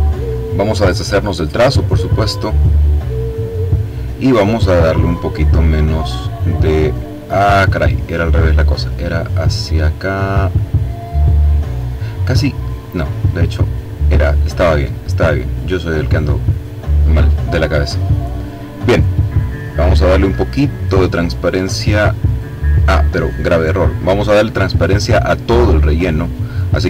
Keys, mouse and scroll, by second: 1.2 click, 2.6 click, 5.1-9.1 drag, 12.7-17.7 drag, 18.6-20.3 drag, 20.6-22.8 drag, 23.1 click, 25.0 click, 26.4 click.